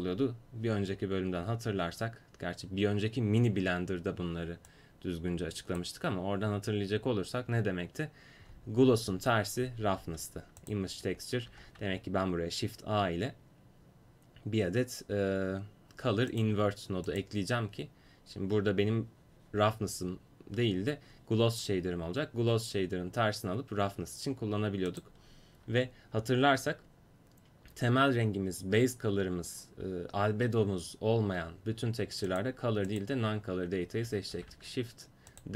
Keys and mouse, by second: 4.7-14.7 drag, 11.5 shift+a, 17.2-21.6 drag, 24.9-34.3 drag, 34.3 shift+d.